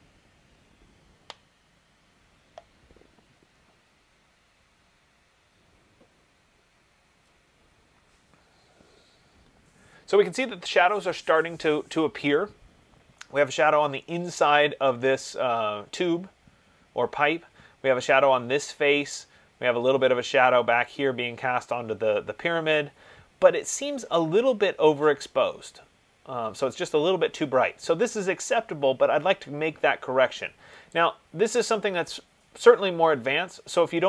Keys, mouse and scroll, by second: 31.1 click.